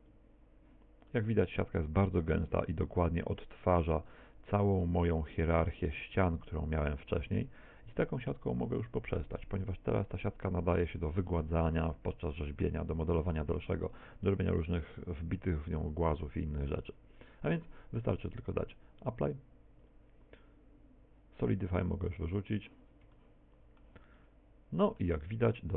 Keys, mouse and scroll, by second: 0.2 click, 1.3 middle click, 4.3 middle click, 6.4-7.0 scroll up 7, 12.3 scroll down 3, 18.7 click, 22.4 click, 23.2 shift+middle click, 24.2 middle click, 25.4 middle click.